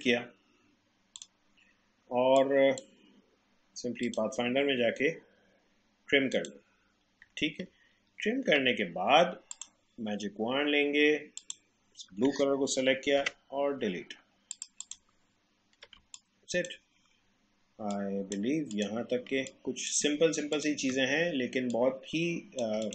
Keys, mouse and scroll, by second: 7.9 alt+scroll up 1, 9.5 click, 13.2 Delete, 14.5 click, 15.3 alt+scroll down 1, 16.0 space, 16.2-18.7 drag, 19.3 space, 19.5 click, 19.8 space, 20.5 click, 21.7 shift+click.